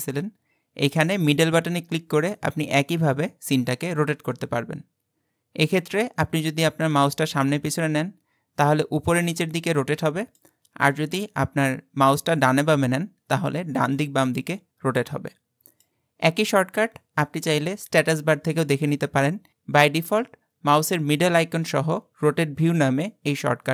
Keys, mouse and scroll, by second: 0.9-3.9 middle drag, 10.9-13.9 middle drag.